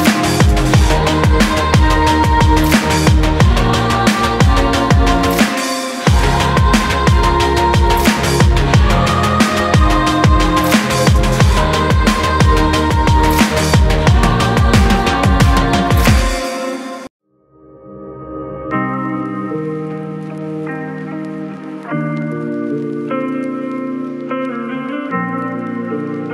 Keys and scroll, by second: 17.9-18.4 typing, 19.5 x, 22.1 x, 23.1 ctrl+z.